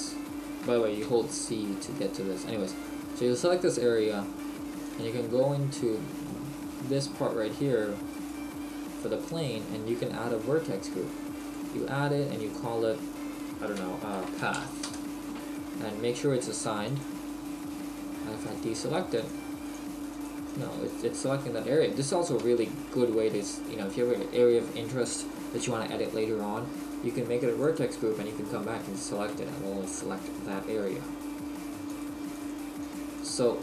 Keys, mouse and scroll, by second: 1.1 c, 2.1 right click, 4.9 click, 8.2 click, 11.5 click, 16.9 click, 22.7 shift+middle click, 23.3-24.4 scroll down 1, 27.7 click, 32.0-33.6 click.